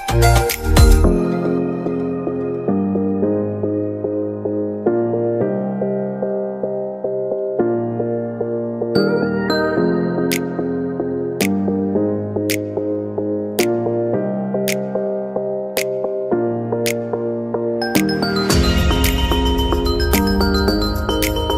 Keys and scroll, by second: 5.0 g, 16.0 ctrl+z.